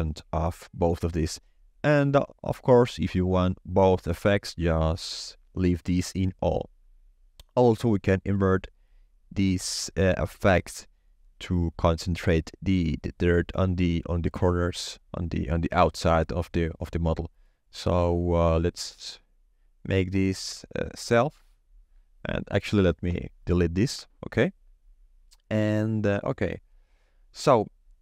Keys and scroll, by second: 23.0 Delete.